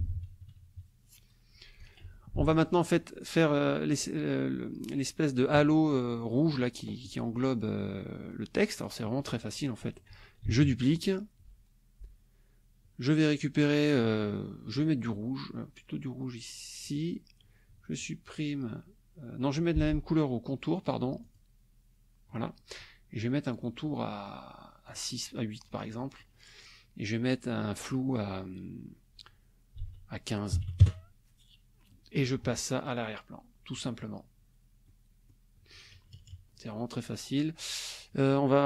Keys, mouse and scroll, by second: 0.0 ctrl+KP_Subtract, 1.8 click, 2.4 F1, 2.5 click, 2.9 click, 8.8 click, 10.4 ctrl+d, 16.8 click, 21.2 shift+click, 23.6 click, 24.8 click, 25.8 click, 27.8 click, 29.8 ctrl+a, 30.5 KP_1, 30.8 KP_Enter, 33.8 click, 34.8 click, 35.9 KP_Subtract, 37.1 click.